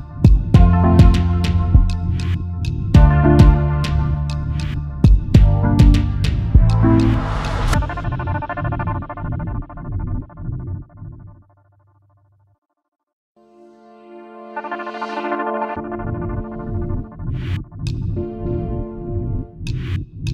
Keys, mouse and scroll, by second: 1.0 alt+shift+click, 2.5-2.8 alt+scroll up 1, 7.4-7.8 alt+scroll down 1, 8.0 space, 8.0 double click, 9.2-9.7 alt+scroll up 1, 9.8 space, 9.9 double click, 13.3 double click, 14.8 ctrl+8.